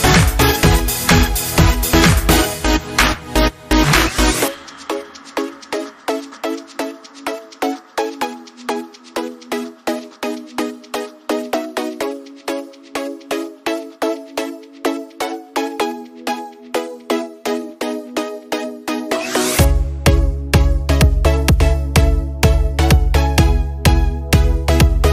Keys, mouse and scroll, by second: 0.7 click, 4.5 scroll up 1, 5.4 click, 11.7 click, 15.9 click, 17.7 click, 19.4-21.5 drag, 21.5 scroll down 1, 21.9-25.1 drag.